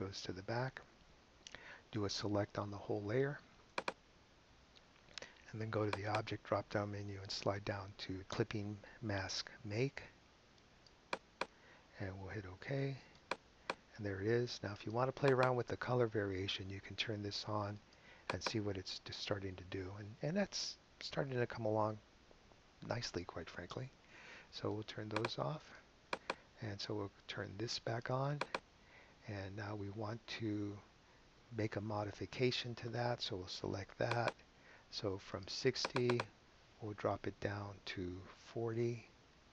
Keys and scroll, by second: 38.8-39.5 typing.